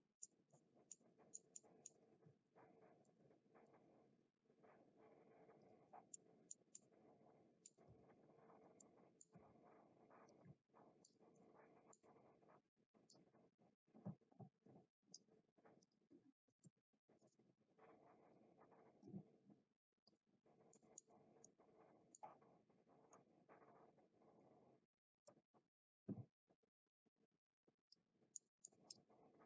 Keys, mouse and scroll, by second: 0.2 middle click, 0.8 middle click, 1.6 middle click, 2.2 r, 3.1 r, 5.6 click, 6.1 middle click, 6.1 r, 6.7-7.6 middle drag, 7.9 r, 8.6 click, 8.9 middle click, 9.4 r, 10.3 click, 10.4 g, 11.0 click, 11.4 middle click, 13.2-15.3 drag, 15.8-17.4 drag, 18.3-20.1 drag, 20.9 middle click, 21.4 middle click, 23.1-24.4 middle drag, 25.4-28.0 drag, 28.5 middle click.